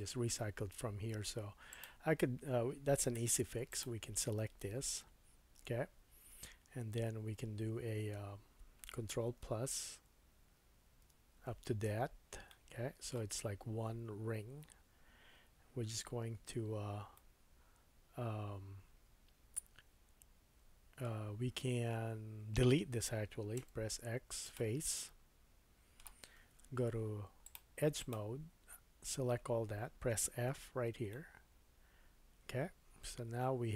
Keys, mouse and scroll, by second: 1.8-3.7 middle drag, 3.2 3, 3.7 click, 6.2 middle click, 9.4 ctrl+KP_Add, 10.0 ctrl+KP_Add, 10.5 ctrl+KP_Add, 11.0 ctrl+KP_Add, 12.5 middle click, 17.1 middle click, 19.6-27.4 middle drag, 23.6 x, 26.6 2, 27.4 click, 27.5 middle click, 28.0 alt+click, 30.5 f, 31.1 middle click.